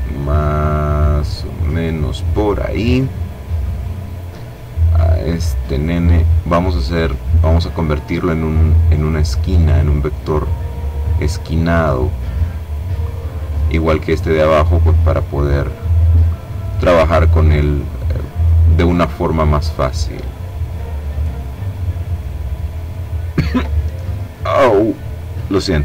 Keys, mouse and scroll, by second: 3.6-5.6 drag, 6.3 click, 8.0-9.8 drag, 10.4-12.2 drag, 13.0-15.0 drag, 15.5-18.0 drag, 18.7-19.8 drag, 20.0-22.3 drag, 24.2-25.8 drag.